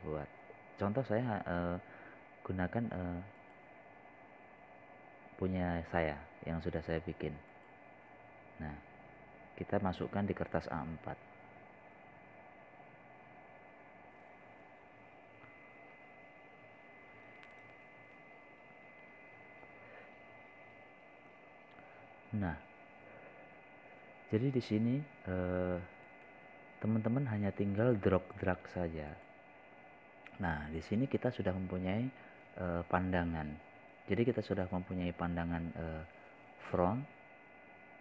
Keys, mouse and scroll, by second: 17.5 click, 25.8 scroll up 1, 26.7 scroll down 1, 29.1 click, 29.8-30.1 scroll up 1, 30.1 scroll down 1, 30.8 click, 34.6 scroll up 1, 35.1 scroll down 1.